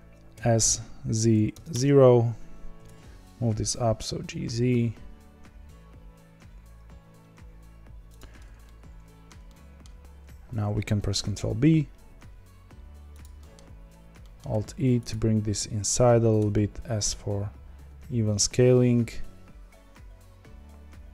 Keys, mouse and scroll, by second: 2.7 g, 8.6-10.2 middle drag, 10.2-11.1 scroll up 2, 11.1 ctrl+b, 13.3-15.0 middle drag, 15.0 alt+e.